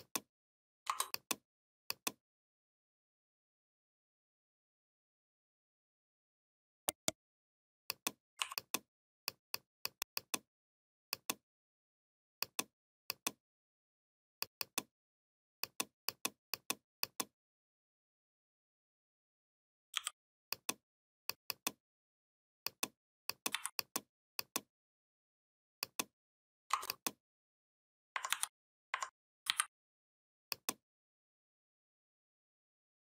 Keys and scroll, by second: 19.7 i, 23.3 v, 28.1 ctrl+c, 29.3 ctrl+b.